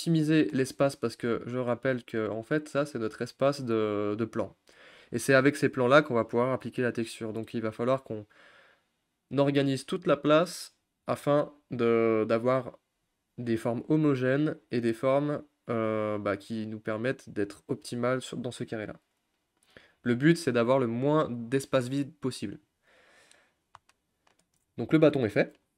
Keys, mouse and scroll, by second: 2.9-19.5 drag, 19.5-23.4 middle drag, 23.4-23.8 scroll up 2, 23.8-25.7 middle drag.